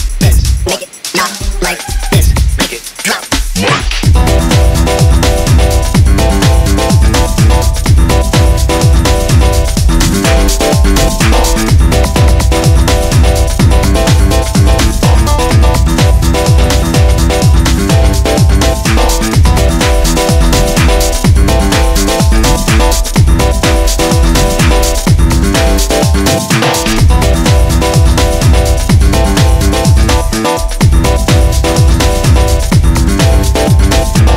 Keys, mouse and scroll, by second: 0.0 scroll up 1, 0.2 i, 1.1 scroll down 1, 1.3 e, 3.8 scroll down 2, 3.9 click, 4.5 ctrl+z, 4.8 scroll up 1, 4.9 e, 5.9 scroll up 2, 6.1 ctrl+r, 6.9 click, 7.3 click, 7.9 click, 8.2 click, 8.8 ctrl+r, 9.9 ctrl+r, 10.8 ctrl+r, 12.0 click, 12.4 click, 12.7 click, 12.9 scroll up 1, 13.0 click, 13.5 click, 14.2 shift+click, 14.5 shift+click, 14.8 shift+click, 16.0 scroll down 1, 16.1 click, 16.8 click, 17.3 scroll down 2, 17.6 click, 18.4 scroll up 1, 18.4 click, 18.8 scroll down 3, 19.0 scroll up 2, 19.1 ctrl+s, 19.6-20.6 drag, 21.9 scroll up 3, 22.1 click, 22.8 scroll down 2, 23.0 click, 23.4-23.9 scroll up 5, 23.9-24.3 scroll down 5, 24.3 scroll up 2, 24.6 click, 25.9 click, 26.1 scroll up 2, 26.3 alt+shift+click, 26.8 alt+shift+click, 29.2 e, 30.9-31.4 scroll up 1, 31.4 s, 32.1 click, 32.3 scroll up 1, 32.5 ctrl+r, 33.4 click, 33.7 click, 34.2 scroll down 3, 34.3 scroll up 2.